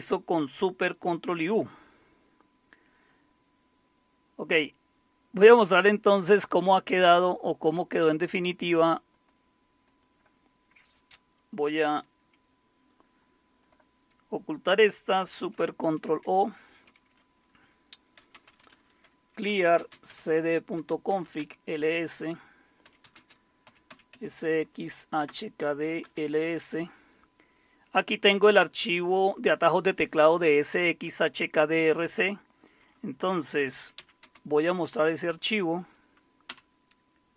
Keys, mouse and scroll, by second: 6.2 click, 7.6 click, 9.1 click, 13.6 click, 16.2 ctrl+super+o, 17.9-21.6 typing, 20.7 Return, 22.6-27.3 typing, 33.4-35.3 typing, 36.5 typing.